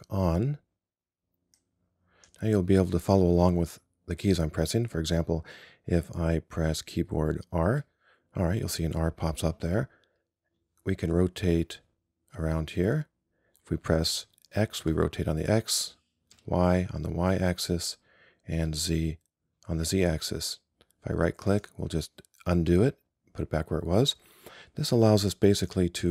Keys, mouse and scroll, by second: 1.6-3.7 drag, 7.8 r.